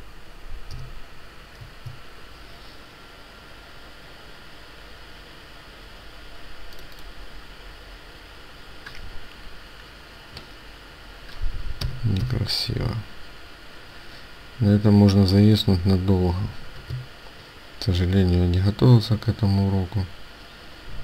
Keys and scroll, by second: 16.7 Return.